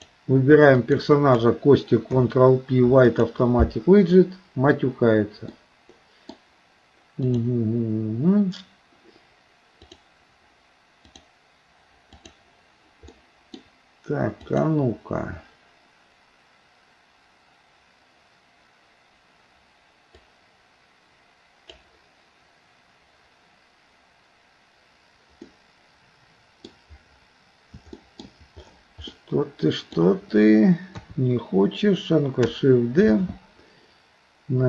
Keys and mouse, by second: 0.0 click, 0.8 shift+click, 2.1 ctrl+p, 5.6 middle click, 7.3-9.1 drag, 11.1-12.5 drag, 13.1 middle click, 14.6 click, 20.3-21.8 drag, 25.5-26.7 middle drag, 28.0 shift+middle click, 29.1 middle click, 31.0 KP_3, 33.1 shift+d.